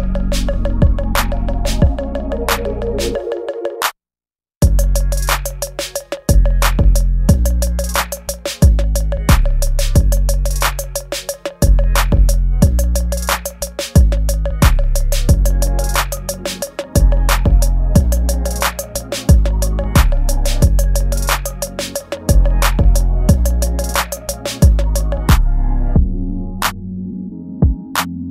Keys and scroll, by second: 3.9 space, 5.7 ctrl+z, 6.5 space, 7.2 ctrl+z, 7.6 ctrl+z, 9.3 space, 14.9 ctrl+z, 15.6 ctrl+z, 18.5 space, 28.1 space.